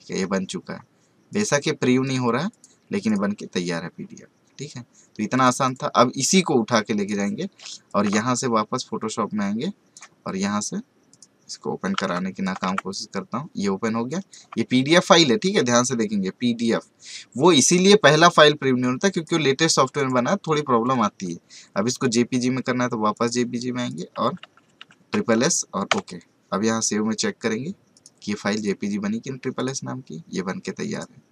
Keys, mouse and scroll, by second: 1.3 click, 2.0 right click, 2.5 click, 3.9 scroll down 1, 5.3-7.8 drag, 8.2-11.1 drag, 11.9 alt+Tab, 12.4 click, 12.6 alt+Tab, 14.1 click, 14.6 alt+scroll down 1, 14.9 alt+scroll up 1, 19.1 click, 24.2-24.8 typing, 27.9 click.